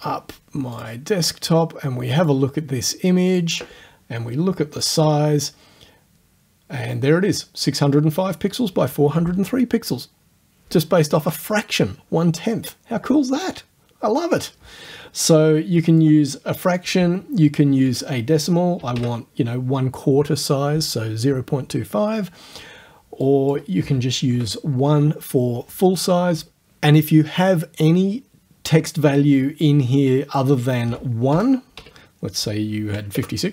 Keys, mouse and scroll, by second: 0.8 click, 2.2 right click, 3.3 click, 4.8 click, 13.4 click, 14.4 click, 16.0 click, 17.7 KP_0, 17.9 KP_Decimal, 18.8 KP_2, 19.0 KP_5, 23.3 click, 24.4 1, 30.0 click, 31.3 BackSpace, 31.8 KP_6, 33.2 Tab.